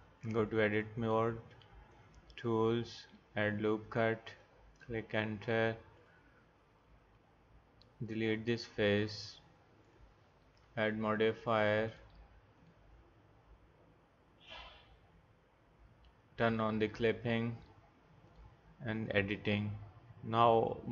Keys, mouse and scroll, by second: 0.2 click, 0.4 click, 6.0-7.0 drag, 8.1 x, 16.5-20.1 drag, 20.3 click.